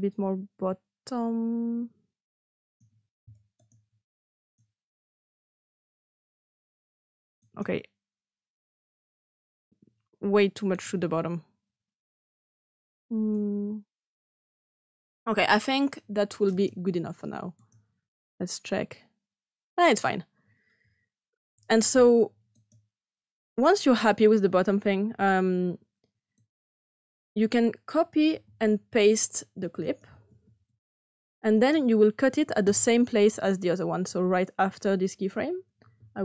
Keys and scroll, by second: 28.2 ctrl+c, 30.2 ctrl+v.